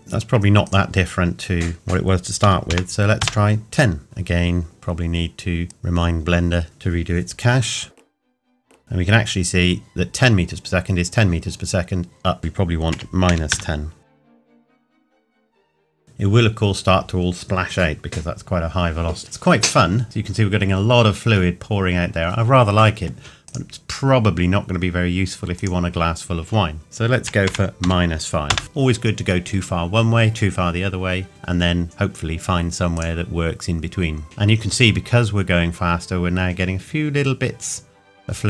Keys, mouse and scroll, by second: 2.4 KP_1, 3.2 KP_Enter, 4.6 click, 7.8 click, 9.3 click, 12.4 click, 12.9 KP_Subtract, 14.4 click, 20.0 middle click, 23.5 click, 27.5 KP_Subtract, 27.8 KP_5, 31.8 click.